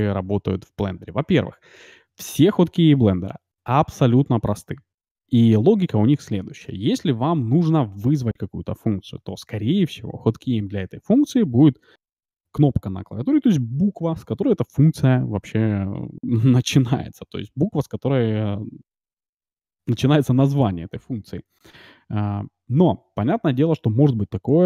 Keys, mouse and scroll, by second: 0.8 n.